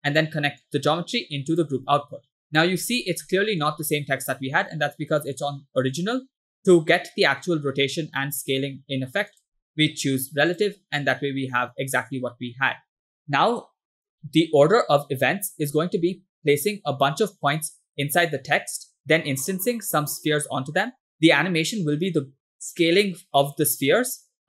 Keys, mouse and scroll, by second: 0.6-1.7 drag, 2.4 click, 2.9-3.3 scroll down 2, 3.4 shift+middle click, 4.7-5.0 scroll up 3, 9.4 click, 10.2 click, 11.2-12.1 middle drag, 13.2 scroll down 2, 20.9 middle drag.